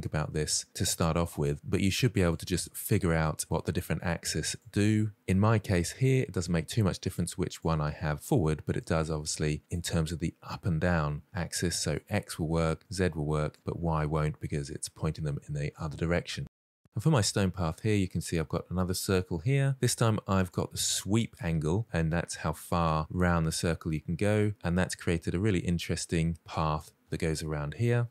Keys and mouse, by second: 2.0 click, 3.1 click, 4.2 click, 6.9 click, 7.3 click, 8.5 click, 9.5 click, 11.9 click, 12.8 click, 13.3 click, 14.4-15.0 middle drag, 16.5 click, 20.3-25.6 drag, 26.4-26.8 middle drag, 26.9 shift+middle click, 27.1 middle drag.